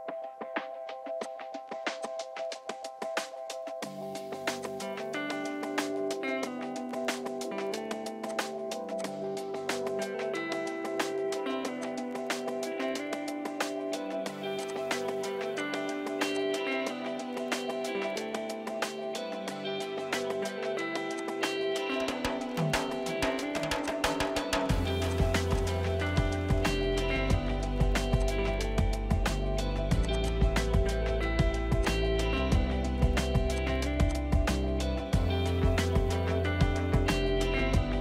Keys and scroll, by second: 1.3-7.9 typing, 10.3 p, 14.5 Escape, 15.4 p, 16.7 Escape, 20.9 r, 25.6 e, 27.1 p, 30.3-31.5 typing, 31.1 ctrl+g, 34.1 space.